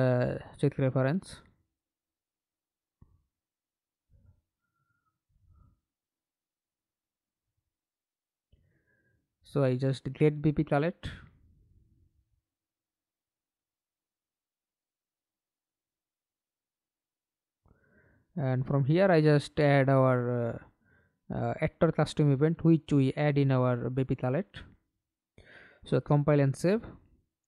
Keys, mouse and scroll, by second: 1.2 right click, 2.2 Delete, 8.3-10.5 scroll up 1, 10.5-11.1 scroll up 1, 19.3-21.5 typing, 21.6 Return.